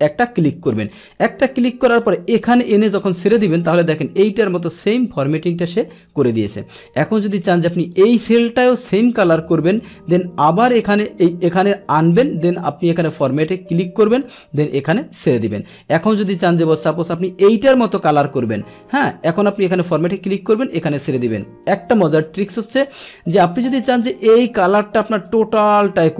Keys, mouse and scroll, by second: 2.6 click, 4.8 click, 5.5 click, 8.0 click, 12.1 click, 13.3 click, 14.8 click, 16.7 click, 19.9-20.9 drag, 23.7 click, 25.3-26.1 drag.